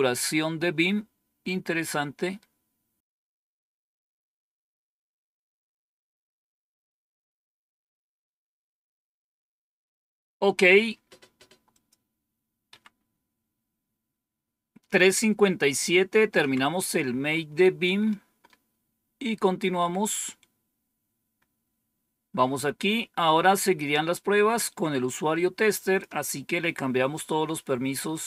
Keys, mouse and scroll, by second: 2.7 scroll down 2, 11.6 click, 12.6 Home, 16.3 End, 24.0-26.7 drag.